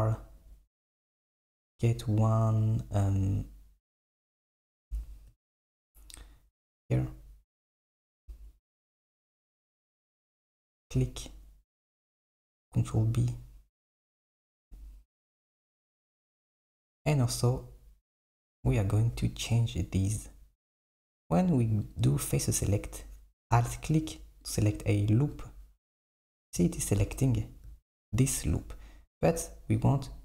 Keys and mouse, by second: 8.0 r, 12.3 ctrl+b, 21.9-23.9 drag, 24.5 alt+click, 25.4 alt+click, 27.3 KP_7.